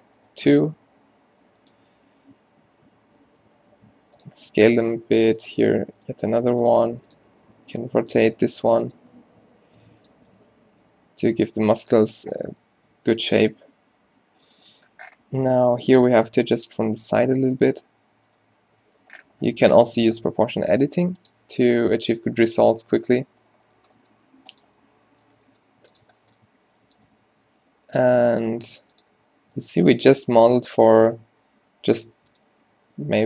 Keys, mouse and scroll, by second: 0.5 g, 3.3 s, 4.4 g, 5.0 ctrl+r, 5.6 s, 6.8 r, 7.3 g, 8.5 r, 9.3 s, 10.3 Tab, 12.5 Tab, 13.0 z, 13.6 o, 14.2 g, 16.6 g, 18.8 g, 21.4 z, 22.4 z, 23.9 g, 25.4 g, 27.4 s, 29.2 z, 29.6 g, 32.3-33.2 drag.